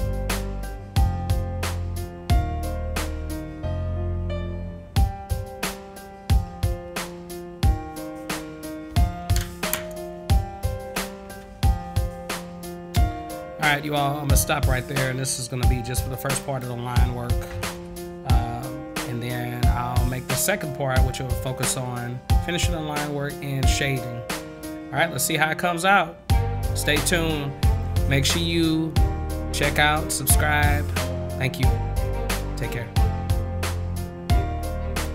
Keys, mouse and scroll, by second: 11.4 ctrl+s, 16.4 click, 24.8 middle click, 35.0 click.